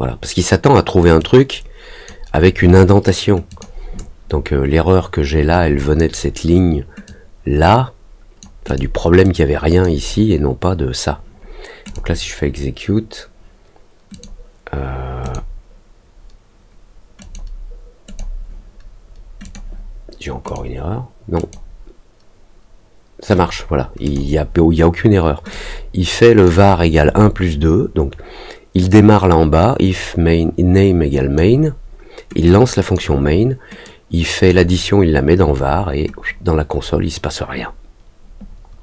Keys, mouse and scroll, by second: 1.1 click, 3.4 click, 7.0-8.3 drag, 8.6 click, 9.2 click, 11.8 click, 14.1 click, 15.2 click, 17.1 click, 18.0 click, 19.4 click, 20.4 click, 21.3 click, 24.0 click, 25.4 click, 28.8-31.3 drag, 32.4 click, 33.8 click.